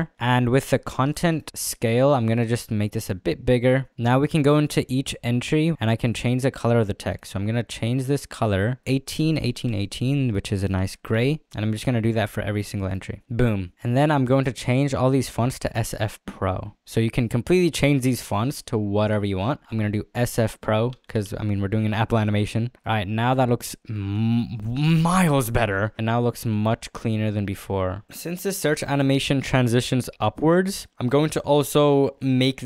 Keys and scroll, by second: 7.9 z, 9.5 1, 9.9 8, 19.7 s, 19.9 f, 20.9 space, 21.2 p, 21.5 r, 21.5 o, 26.0 z.